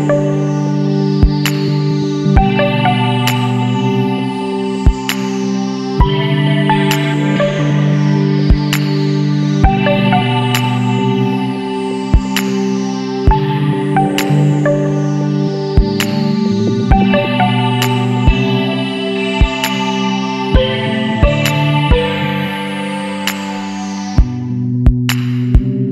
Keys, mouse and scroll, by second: 0.7-3.7 drag, 5.9-8.3 drag, 8.3-9.2 middle drag, 9.2 scroll up 1, 9.4-11.7 ctrl+middle drag, 11.7 alt+a, 12.2-15.4 shift+middle drag, 15.4 click, 17.7 click, 20.3-20.7 scroll down 2, 20.7 middle click, 21.4 Tab, 22.1 scroll down 2, 22.4-23.5 middle drag, 23.5 scroll up 2, 23.9-24.8 middle drag, 24.8 scroll down 2, 25.0 middle click, 25.5 Tab.